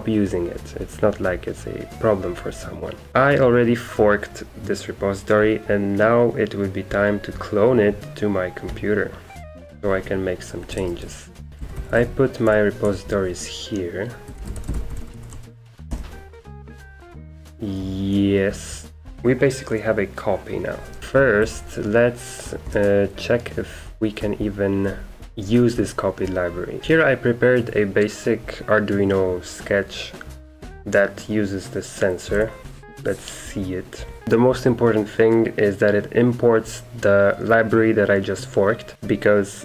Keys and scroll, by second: 3.1 ctrl+shift+Tab, 9.8 super+2, 10.8 super+Return, 11.5 ctrl+c, 11.5 Return, 11.5 super+q, 11.5-15.9 typing, 12.8 Return, 15.9 Return, 18.5-19.6 typing, 21.1 super+#, 21.4 super+2, 22.7 super+Return, 24.2 super+3, 24.8 super+2, 26.8-28.3 typing, 32.3-34.7 typing, 36.5 typing.